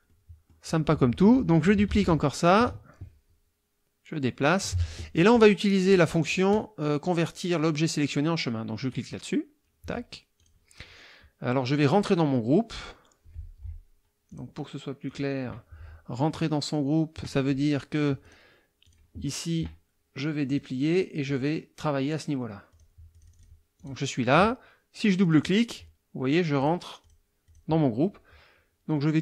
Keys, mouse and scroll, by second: 0.1 click, 1.9 ctrl+d, 2.5-4.8 ctrl+drag, 5.9 click, 8.9 click, 10.4 click, 14.3 click, 15.1 click, 18.2 click, 18.8 click, 20.5 click, 21.2 click, 22.7 click, 23.1 click, 23.8 click, 25.2 click, 26.6 click, 27.0 click, 27.4 click.